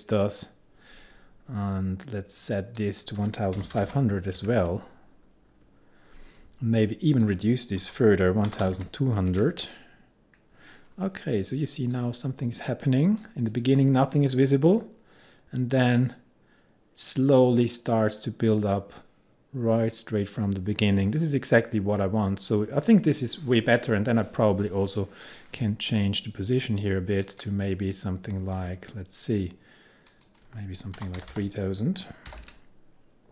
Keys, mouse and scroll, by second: 2.8 click, 3.0-4.4 typing, 7.3 click, 7.9-9.3 typing, 12.0-24.7 drag, 26.0 click, 30.8-32.4 typing.